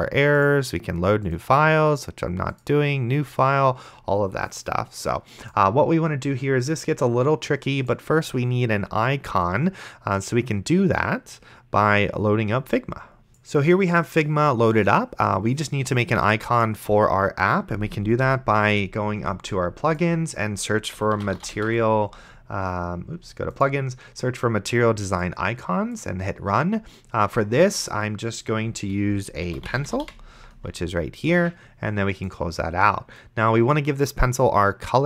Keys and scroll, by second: 13.3 F11, 20.8-22.2 typing, 29.3-30.5 typing.